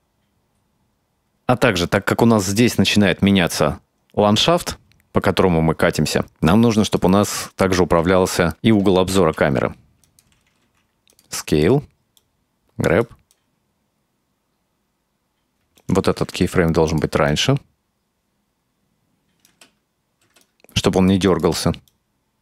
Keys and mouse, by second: 1.3-6.6 drag, 6.9 right click, 9.2 shift+d, 10.7 s, 11.5 right click, 12.2 right click, 13.4-15.5 drag, 15.8 right click, 16.3 g, 17.3-19.5 drag, 19.5 space, 20.3 space, 20.5-21.1 drag, 21.3 right click, 21.9-22.4 right drag.